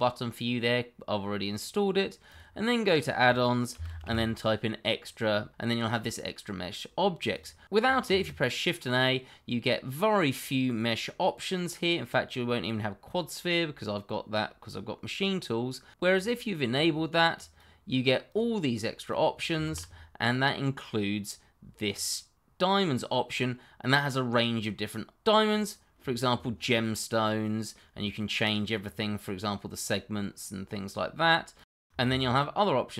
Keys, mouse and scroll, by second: 2.2 click, 3.7 e, 3.8 x, 4.0 t, 7.3 click, 8.0 shift+a, 16.1 click, 19.6 shift+a, 25.4 click, 26.3-26.7 scroll up 1, 26.7 middle click, 28.8 click, 31.7 double click, 32.0 shift+a.